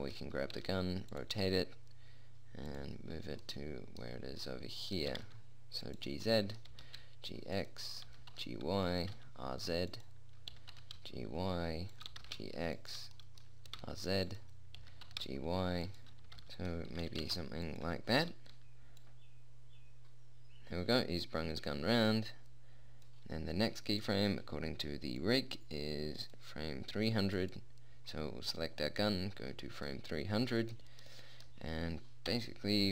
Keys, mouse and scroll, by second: 0.9 r, 1.7 g, 5.5 g, 7.1 g, 8.5 g, 9.4 r, 10.9 g, 12.5 g, 14.1 r, 15.2 g, 17.3 r, 18.8-20.3 middle drag, 20.3 click, 21.3 middle click, 24.1-25.6 right drag, 25.6 middle click, 26.2 right click, 27.7-30.3 right drag, 30.3-32.7 middle drag, 32.7 KP_7.